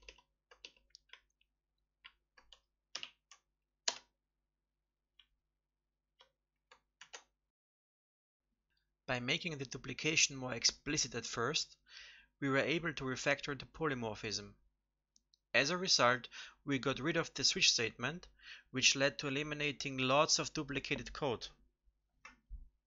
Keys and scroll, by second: 2.9 ctrl+alt+n, 6.9 ctrl+s.